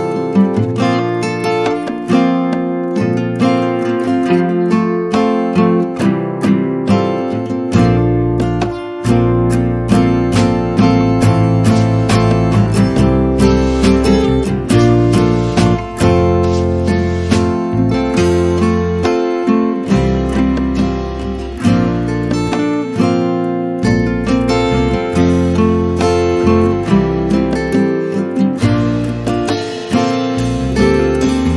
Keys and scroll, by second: 0.2 c, 2.0 2, 2.2 Return, 3.0 space, 7.3 space, 8.7 p, 10.0 Return, 11.3 space, 12.6 e, 14.4 space, 21.7 b.